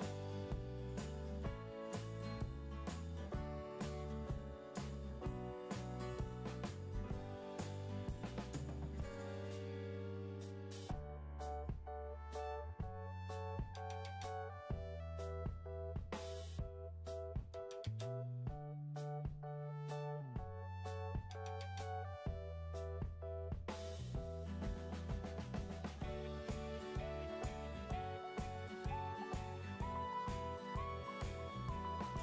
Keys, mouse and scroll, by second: 7.2 typing, 20.4 2, 20.6 2, 29.0 typing.